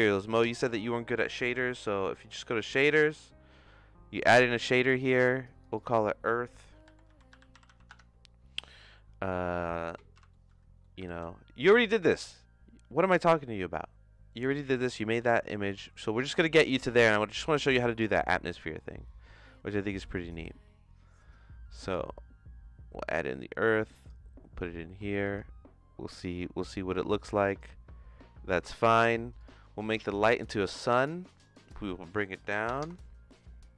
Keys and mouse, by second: 0.6-2.2 drag, 5.6 click, 7.6 click, 8.9 middle click, 9.4 middle click, 10.1 n, 10.3 middle click, 10.9 middle click, 11.0 shift+a, 18.7 middle click, 21.9-23.1 drag, 23.8 click, 27.3 click, 29.3 click, 30.6 click, 31.6-33.1 drag.